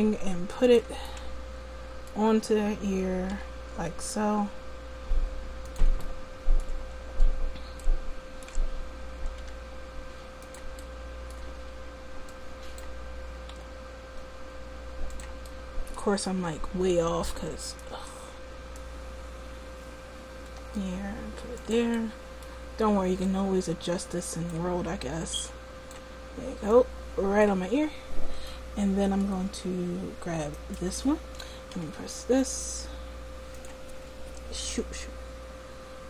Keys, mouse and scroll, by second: 3.4 g, 9.4 g, 9.9 click, 13.6 g, 17.7 middle click, 20.5 g, 27.8 click, 30.7-31.7 right drag, 31.7 g.